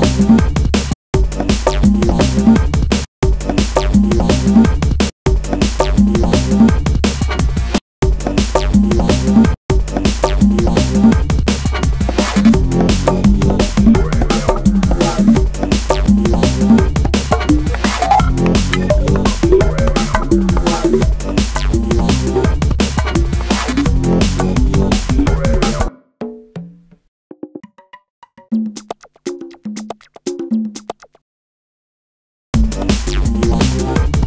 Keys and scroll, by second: 4.8 space, 6.9 super+space, 8.2 space, 32.0 space.